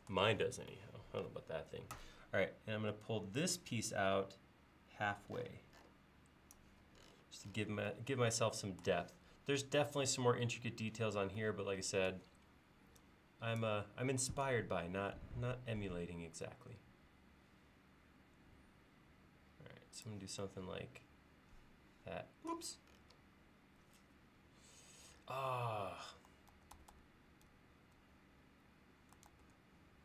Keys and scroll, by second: 26.5 super+z, 29.3 super+z.